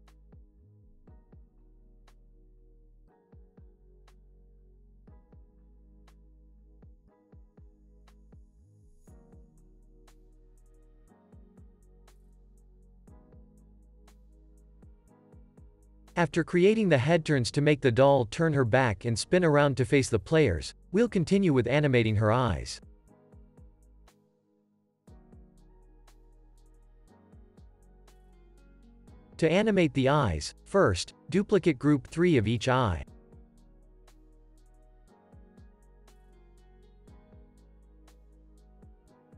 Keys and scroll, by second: 5.3 super+s, 6.3 x, 11.0 n, 11.5 super+s, 17.3 super+=, 18.7 space, 20.4 super+s.